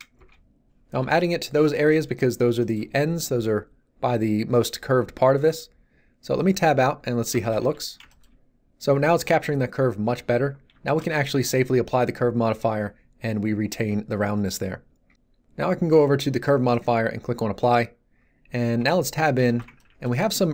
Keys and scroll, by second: 0.1 Return, 6.6 Tab, 7.6 z, 18.8 Tab.